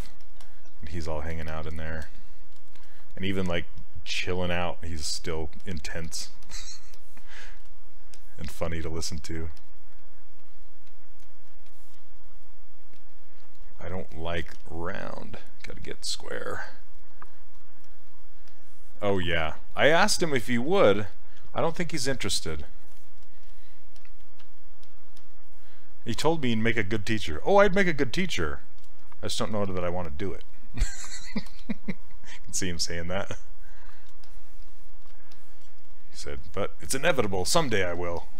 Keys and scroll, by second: 3.8 s, 14.6 s, 20.5 s.